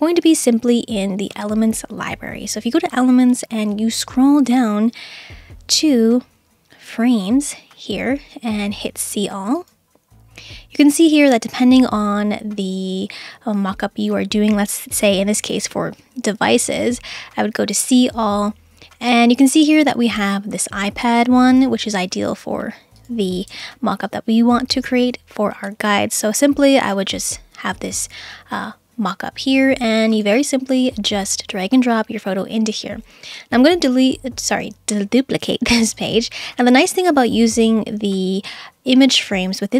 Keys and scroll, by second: 23.5 BackSpace.